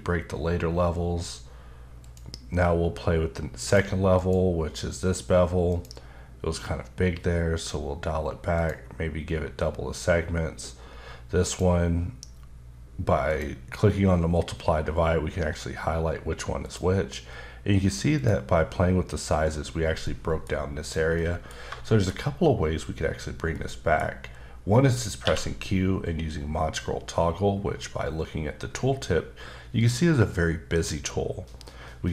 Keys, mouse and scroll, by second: 2.0 click, 3.6 click, 4.1 click, 5.7 click, 8.6 click, 11.4 click, 13.3 click, 16.6 click, 18.1 click, 20.0 middle click, 20.8 click, 21.1 middle click, 21.9 shift+middle click, 25.2 q.